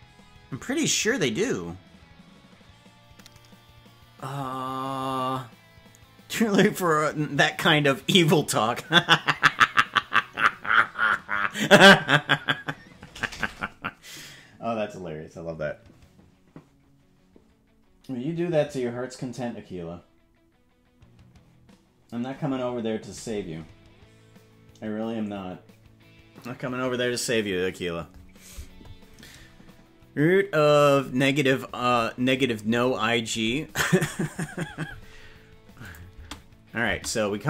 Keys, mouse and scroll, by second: 35.8 click, 36.3 space, 36.9 space.